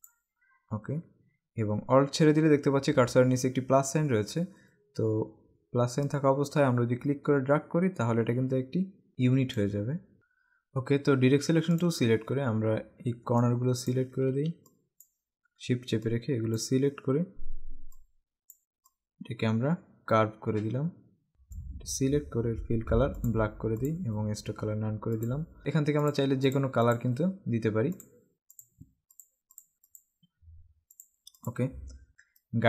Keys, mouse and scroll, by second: 6.2 click, 11.9 click, 13.5 click, 14.7 click, 16.1 click, 18.0 click, 19.0 click, 23.4 click, 25.3 click, 26.2 click, 28.1 click, 29.4 click, 30.1 click, 31.1 click, 32.5 click.